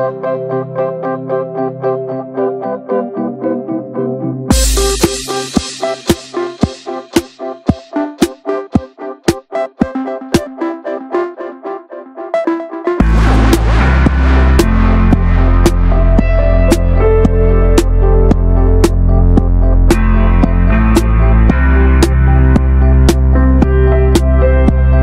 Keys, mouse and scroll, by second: 1.5 ctrl+b, 3.4 alt+z, 3.6 Tab, 3.7 scroll down 9, 3.9-4.4 shift+middle drag, 4.4 ctrl+s, 4.6-5.7 middle drag, 5.7 ctrl+s, 5.9 shift+middle drag, 5.9 scroll up 1, 6.2 Tab, 6.3 shift+middle click, 6.6 scroll up 2, 6.9-7.4 shift+middle drag, 7.4 3, 7.5 click, 8.3 alt+z, 8.6 middle click, 8.8 alt+z, 8.9 shift+middle click, 9.4 e, 10.6 scroll down 4, 10.8 middle click, 11.2-11.7 scroll up 3, 11.7 ctrl+r, 13.4 middle click, 13.6 ctrl+z, 14.0 middle click, 14.1-15.2 scroll up 4, 14.2 Tab, 14.4 shift+middle click, 15.2 ctrl+r, 16.0 middle click, 16.6 ctrl+r, 17.0-18.2 shift+middle drag, 18.2 click, 18.9 middle drag, 19.2 Tab, 19.2 scroll down 9, 19.5 shift+middle click, 19.8 ctrl+scroll up 1, 19.9 ctrl+s, 20.5 alt+middle click, 20.6 alt+middle click, 21.1 alt+scroll up 1, 21.3 alt+z, 21.7 click, 21.9-22.3 scroll up 2, 22.3-23.6 drag, 23.6 ctrl+r, 24.1 click.